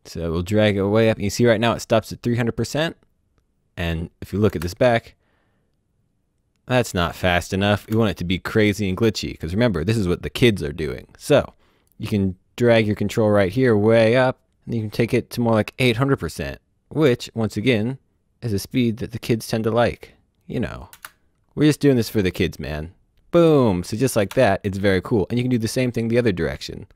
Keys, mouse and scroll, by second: 3.9 click, 4.4 space, 7.8 space, 11.4 click, 20.9 space, 24.1 space, 26.6 click.